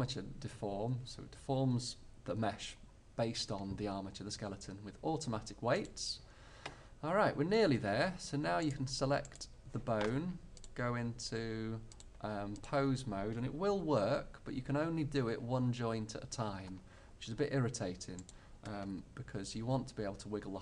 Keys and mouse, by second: 7.5-10.4 middle drag, 13.8 g, 18.3-20.2 drag, 19.0 g.